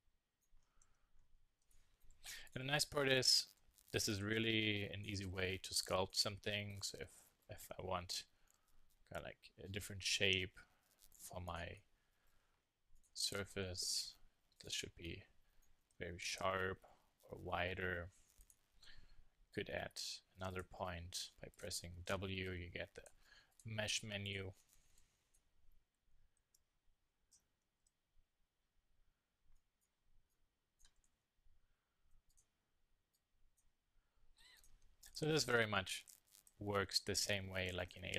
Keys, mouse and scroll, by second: 0.6 Tab, 4.2 Tab, 4.5 middle click, 4.7 z, 7.4-9.1 drag, 8.6 s, 9.5 click, 9.6 z, 10.3 click, 11.0 s, 14.9 click, 15.9 click, 17.1 s, 17.9 click, 19.2 s, 21.8 click, 22.8 w, 24.6 a, 25.0 z, 28.4 click, 31.1 super+z, 32.9 middle click, 33.6 click, 34.3 s, 35.5 click.